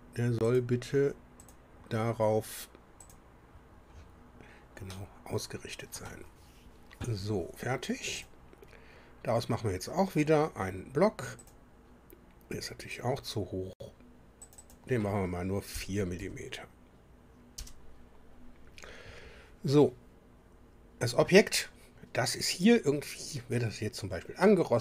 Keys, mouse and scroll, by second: 0.5 click, 1.4 click, 3.0 click, 3.9 scroll down 1, 4.9-6.2 drag, 8.2 click, 11.4 click, 14.4 click, 15.7 KP_4, 16.2 Delete, 17.5 Return.